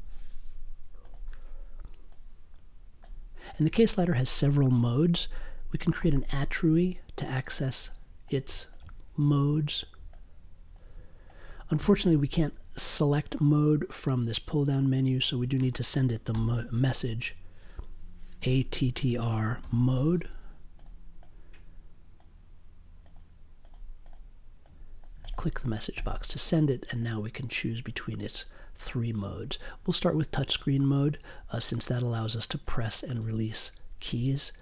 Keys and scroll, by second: 0.0-0.3 typing, 6.0 a, 16.3 m, 18.3 a, 19.2 space, 19.6 m, 19.9 e.